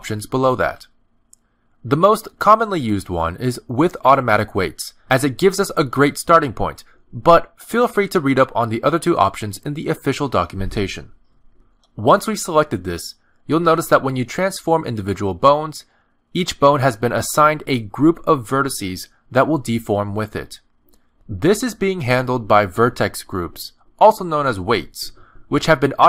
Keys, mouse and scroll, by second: 15.7 click, 16.2 click, 16.9 middle click, 17.3 ctrl+Tab, 17.8 click, 18.2 middle click, 18.8 r, 20.6 middle click, 21.5 click, 21.9 r, 23.4 click, 23.8 r, 25.1 middle click, 25.7 r.